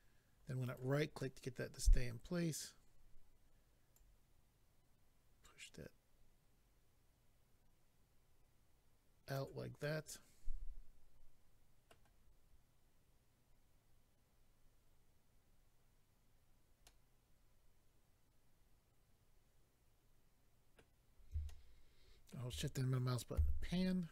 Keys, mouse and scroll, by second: 0.6 right click, 0.7 right click, 1.2 middle click, 3.9 click, 9.8 middle click, 16.8 middle click, 21.4 shift+middle click, 23.3 a.